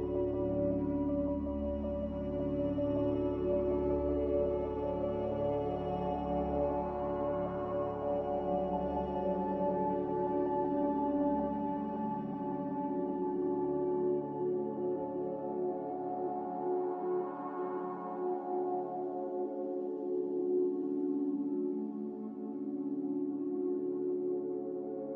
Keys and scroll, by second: 0.0-1.5 typing, 6.0-6.8 typing.